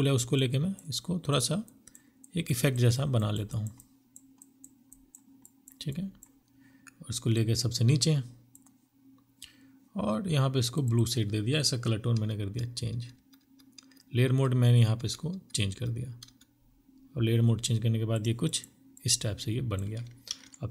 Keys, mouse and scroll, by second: 2.0 double click, 9.8 double click, 11.1 Down, 11.3 Down, 11.8 Down, 12.0 Down, 12.2 Down, 12.7 Down, 13.1 Down, 13.8 Down, 14.2 Down, 14.6 Down, 17.3 double click, 19.2 ctrl+t.